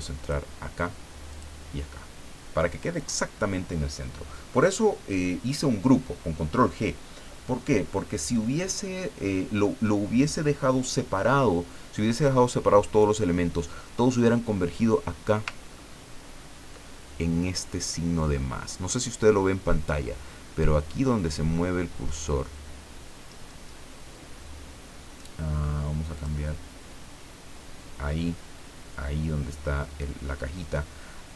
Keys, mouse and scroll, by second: 0.2 click, 1.3 click, 3.0 click, 15.7-16.1 ctrl+scroll up 2, 26.1 click.